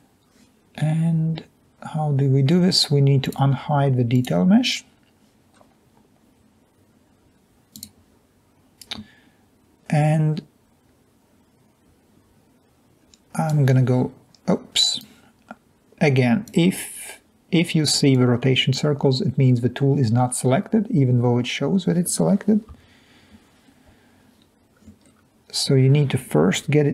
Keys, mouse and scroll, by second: 13.5 click, 14.7 click, 22.8 3, 23.6-24.2 scroll down 2, 25.0-25.8 scroll down 2, 26.5-26.9 ctrl+drag.